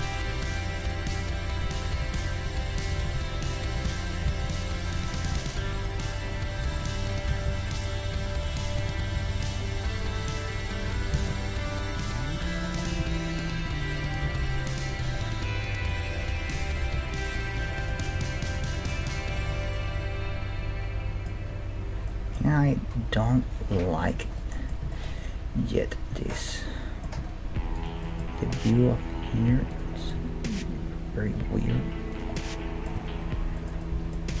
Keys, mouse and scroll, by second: 1.1-5.6 right drag, 1.9 g, 2.9 g, 4.3 g, 5.6 middle click, 6.4-12.6 right drag, 7.4 g, 9.1 g, 11.1 g, 12.9 g, 14.2 g, 15.1 right click, 15.8 middle click, 16.9 Tab, 18.8-21.4 middle drag, 22.1-23.9 middle drag, 23.9-24.4 scroll down 1, 24.4-27.1 middle drag, 27.2 Tab, 27.8 right click, 28.0 middle click, 30.1 g, 31.7 middle click, 32.3-34.4 middle drag, 33.0 Tab.